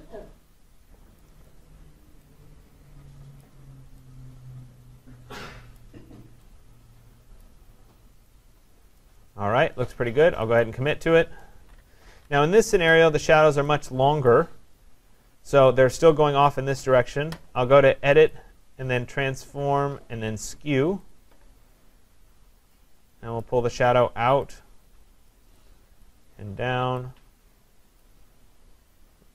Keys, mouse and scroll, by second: 1.2 click, 3.4 click, 5.8 click, 7.4 click, 9.0 click, 12.3 ctrl+=, 12.8 ctrl+=, 14.3 click, 18.3 click, 21.2 click, 25.3 click, 26.0 click, 28.0 click.